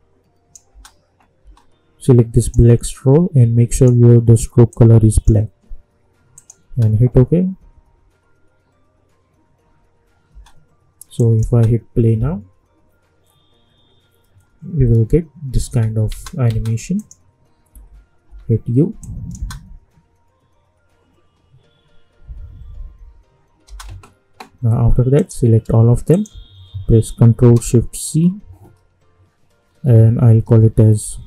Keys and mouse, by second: 0.7 space, 2.4-6.3 drag, 6.6 space, 10.3 space, 11.2 click, 11.5 space, 15.6 space, 16.9 click, 17.7 u, 18.2 u, 19.0 click, 19.3 space, 23.6 space, 25.1 click, 26.1 shift+click, 28.0 ctrl+shift+c, 31.0 ctrl+shift+c.